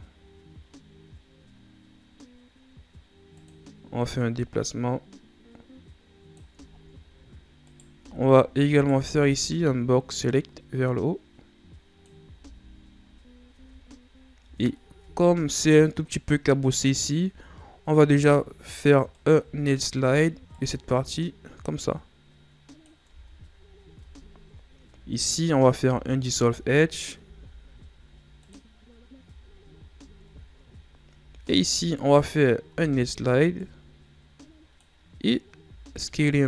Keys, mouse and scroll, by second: 4.2-6.6 drag, 6.6-7.6 shift+scroll up 9, 7.6 right click, 7.9 z, 8.7 right click, 8.9 b, 10.8-12.3 drag, 12.3 z, 12.9 scroll up 1, 13.5 Tab, 14.1 scroll up 1, 14.3 Tab, 14.9 Tab, 17.2 Tab, 19.1 alt+right click, 19.9 ctrl+e, 23.0 Tab, 23.9 Tab, 25.0 alt+right click, 26.0 alt+right click, 27.1 x, 29.2 Tab, 29.8 Tab, 30.4 scroll up 3, 31.4 alt+right click, 32.6 ctrl+e, 35.6 s.